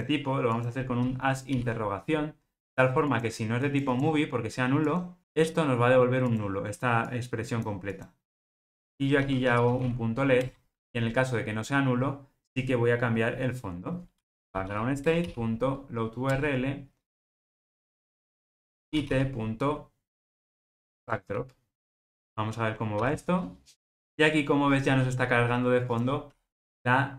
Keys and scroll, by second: 10.4 Return, 15.0 Return, 21.0 Return, 22.0 ctrl+alt+o, 23.0 ctrl+r.